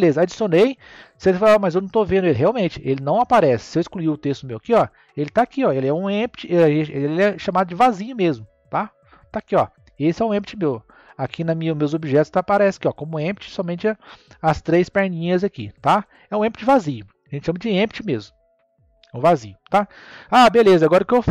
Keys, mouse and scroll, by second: 3.9 click, 4.7 scroll up 1, 6.0-7.2 shift+middle drag, 7.2 scroll up 1, 8.3-11.4 middle drag, 16.3-16.7 scroll down 7, 18.6 click, 19.5 scroll down 1, 19.6-21.3 middle drag.